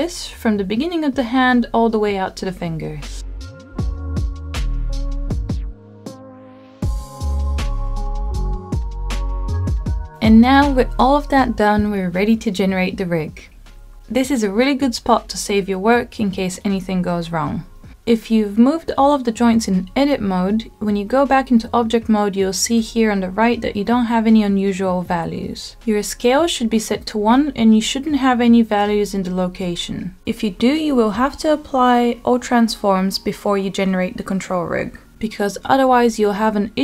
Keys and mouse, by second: 0.0 g, 2.7 g, 3.1 g, 4.3 click, 5.5-8.3 middle drag, 9.8 middle click, 11.5 shift+middle click, 12.7-15.0 middle drag, 16.4-19.6 drag, 19.6 Tab, 22.2 Tab, 29.0-31.5 middle drag.